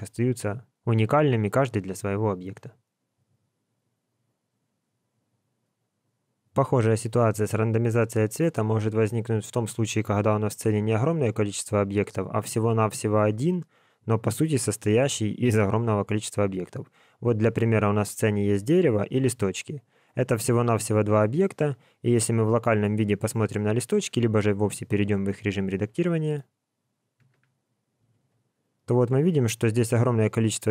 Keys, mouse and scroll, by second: 17.1 click, 19.1 click, 20.6 click, 22.1 KP_Divide, 26.2 right click, 27.3 Tab, 28.1 alt+a, 28.5-29.4 scroll up 7, 29.4 scroll down 2, 29.8 middle click, 30.4 scroll up 1, 30.5 scroll down 1, 30.6 scroll up 1.